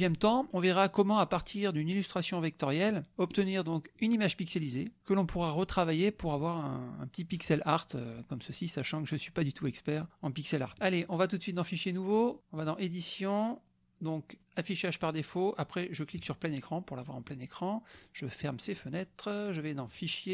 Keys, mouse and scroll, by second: 0.5 middle click, 1.9 click, 3.4 click, 4.0 middle click, 4.6 middle click, 5.6 click, 11.5 click, 12.2 click, 12.6 click, 16.1 click, 17.9 click, 18.4 click, 19.9 drag.